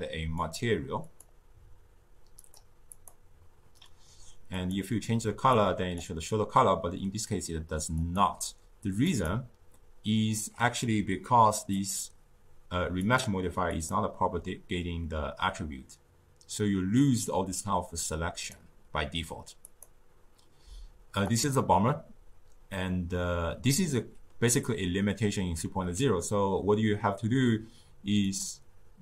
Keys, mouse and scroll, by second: 0.3-4.9 drag, 7.9 click, 9.0 click, 11.8 click, 12.9-16.6 drag, 17.5-19.7 drag, 21.1-24.3 drag.